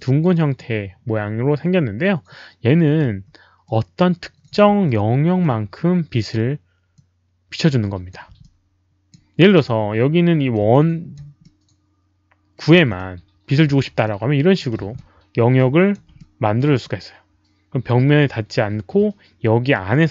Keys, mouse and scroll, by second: 3.0 r, 3.6 middle click, 4.5 w, 4.8 middle click, 6.1-7.4 typing, 6.9-8.0 drag, 6.9 middle click, 8.4 alt+click, 9.2-9.9 typing, 9.4 alt+click, 9.4 middle click, 10.7 alt+click, 11.4-12.5 middle drag, 12.7-14.5 typing, 12.9-13.4 middle drag, 14.0 middle click, 14.0 alt+click, 14.9-15.9 alt+drag, 16.1 middle click.